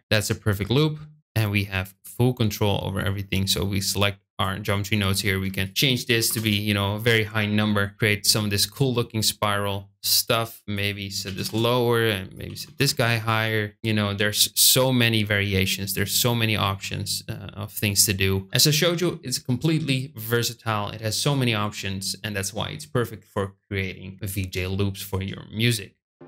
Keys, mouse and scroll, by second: 1.8 click, 4.2 click, 5.5-7.2 drag, 10.6-11.8 drag, 12.2-13.6 drag.